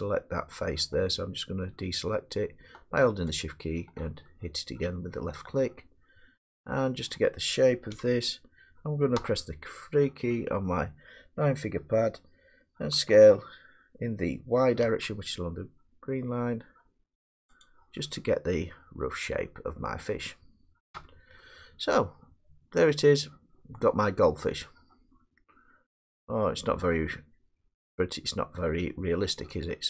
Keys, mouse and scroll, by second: 3.4 shift+click, 7.0 middle click, 7.9 1, 9.2 3, 13.0 s, 14.8 y, 17.6-19.4 drag, 20.1 middle click, 20.1 scroll down 1, 20.9 Tab, 22.8 scroll, 26.9 middle click, 27.7 Tab, 28.9 middle click, 29.8 scroll.